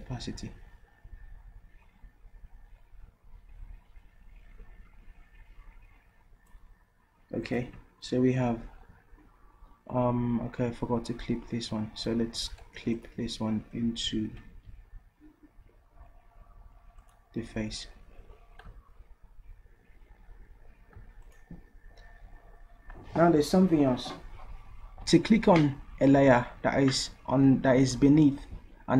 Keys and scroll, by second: 14.5 ctrl+z.